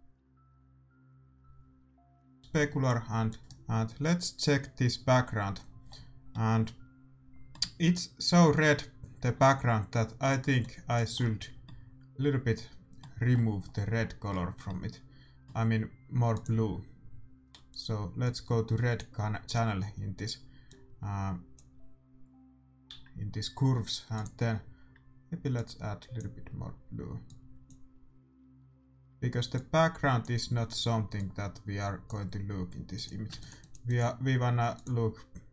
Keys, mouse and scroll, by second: 2.4-4.6 drag, 2.4-3.4 middle drag, 3.4 ctrl+s, 3.9-5.8 right drag, 6.8-9.2 middle drag, 10.6-13.1 drag, 11.4 middle click, 16.4 middle click, 16.7-20.0 drag, 19.7 middle click, 21.3-23.1 drag, 25.1-29.9 drag, 30.0-35.5 drag, 33.6 ctrl+s.